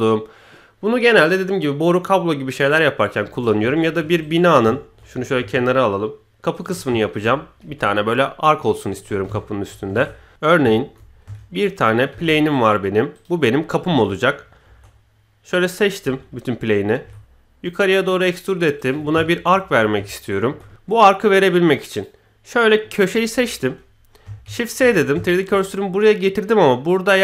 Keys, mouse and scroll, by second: 2.2-2.5 scroll down 1, 2.8-3.2 scroll up 1, 3.2 KP_1, 3.6-3.9 shift+middle drag, 4.2 click, 4.7-5.0 shift+middle drag, 5.1 g, 6.8-7.1 shift+middle drag, 7.6 KP_1, 9.4 ctrl+shift+middle click, 9.9 shift+a, 10.3 shift+s, 10.3 shift+c, 10.7 shift+middle drag, 11.1 scroll up 1, 12.1 shift+a, 14.2 KP_1, 14.6 Tab, 16.0 a, 17.0 e, 19.2 shift+middle click, 19.7-20.4 scroll up 2, 20.1 shift+middle drag, 20.8-21.3 middle drag, 21.9 click, 23.3 KP_1, 24.4 shift+s, 25.2 shift+middle click.